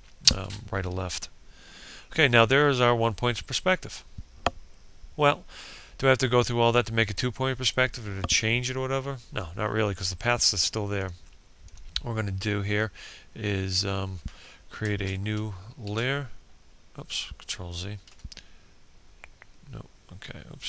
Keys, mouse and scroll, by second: 9.1 click, 13.2 ctrl+shift+n, 14.0 Return, 16.2 ctrl+z, 18.8 click.